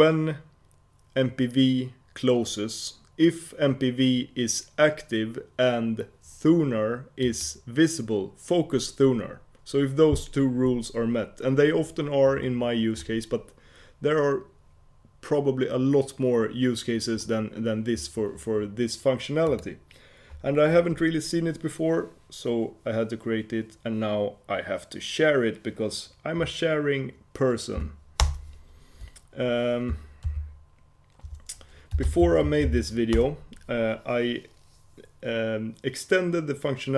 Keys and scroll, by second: 28.3 shift+super+Return, 30.4 ctrl+super+k.